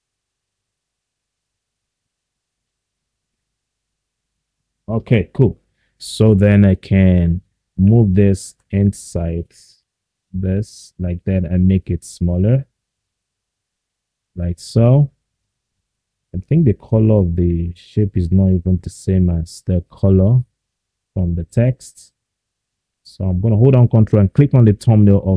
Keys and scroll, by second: 0.7 ctrl+z.